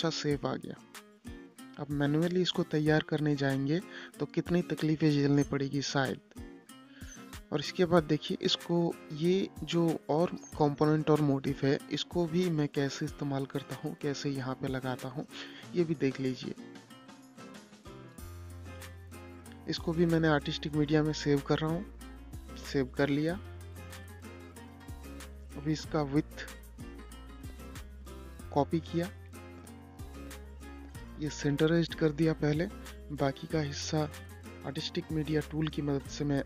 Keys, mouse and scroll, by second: 0.8-5.4 drag, 7.8 click, 15.1 click, 16.8 l, 18.0 click, 19.4 i, 19.8 Return, 20.9 click, 21.9 space, 24.3 click, 25.7 ctrl+c, 26.5-30.2 drag, 30.2-30.7 scroll up 1, 31.3 shift+click, 32.4 c, 32.8 click, 33.7 scroll up 1, 34.3-36.3 drag, 36.3 ctrl+scroll down 2.